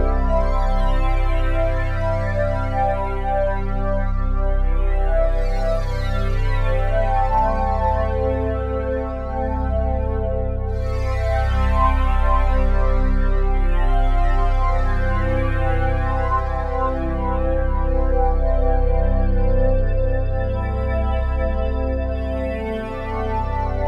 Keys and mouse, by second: 0.3 ctrl+z, 2.1-8.0 drag, 9.1-21.7 drag, 21.9 drag, 22.3 drag.